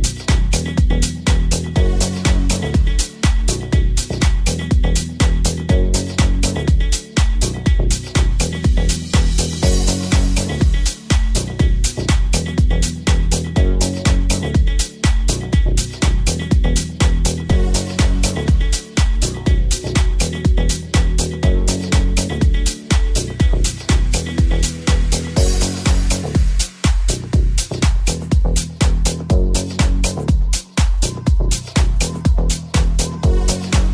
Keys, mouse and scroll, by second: 2.8-7.8 middle drag, 4.5 z, 7.8 right click, 7.8 z, 7.8-20.0 shift+middle drag, 20.0 click, 20.1 shift+0, 22.9-29.1 drag, 23.5 right click, 27.9 g, 29.1-31.2 middle drag, 29.4 r, 31.2 right click, 31.3-33.9 middle drag, 31.8 r.